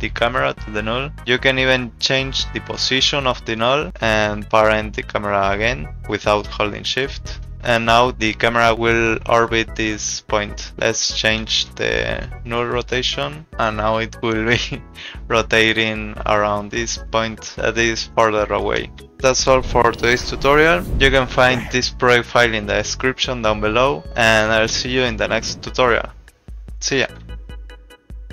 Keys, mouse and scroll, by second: 0.5 click, 5.5 click, 7.5 r, 11.0 click, 11.4 r, 12.8 click, 19.0 ctrl+z.